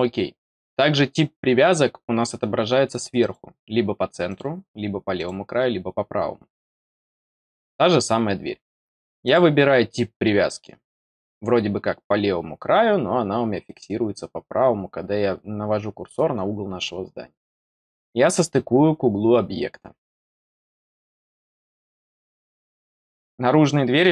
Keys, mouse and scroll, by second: 3.1 click, 4.2 click, 5.1 click, 9.2 click, 13.5-13.8 scroll down 4, 20.0 click.